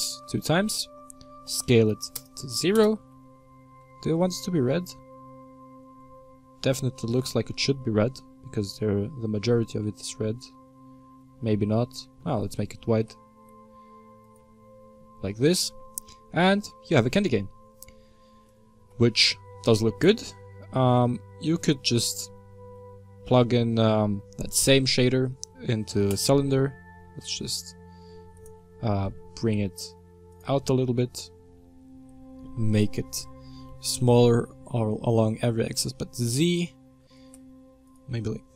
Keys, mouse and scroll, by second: 1.3 s, 3.7 Tab, 4.2-7.2 middle drag, 7.3-11.0 shift+middle drag, 11.8 Tab, 12.9 g, 14.4 Tab, 14.9-16.1 middle drag, 16.1-16.5 scroll down 3, 16.5-26.1 middle drag, 28.1 s, 29.0 middle click, 29.3 g, 30.5-31.7 middle drag, 31.7-32.3 scroll up 1, 32.3-32.7 scroll down 1, 32.7 shift+middle click, 33.1 s, 36.9 s, 38.1-38.5 middle drag.